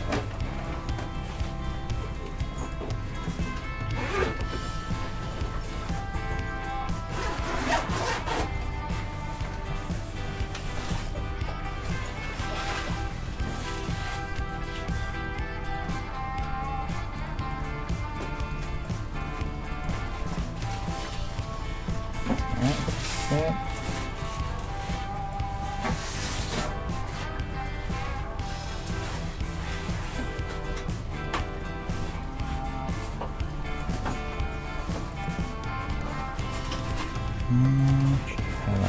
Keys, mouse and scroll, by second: 1.2 ctrl+r, 2.2 middle click, 2.6 middle click, 3.1-7.1 right drag, 5.8-9.2 middle drag, 6.2 g, 7.7 ctrl+Tab, 8.3-10.0 right drag, 8.5 g, 10.2 right click, 11.1-12.9 middle drag, 11.2 g, 14.5-16.3 right drag, 15.0 g, 17.2-18.7 right drag, 17.7 g, 18.7-22.5 middle drag, 19.7-21.1 right drag, 19.9 g, 22.5-25.2 right drag, 24.2 KP_3, 24.3-27.1 middle drag, 25.5 g, 26.2 r, 26.7 g, 27.9-33.9 right drag, 28.1 g, 29.7 g, 32.5 g, 33.7-38.8 middle drag, 34.4 g, 36.4-38.2 right drag.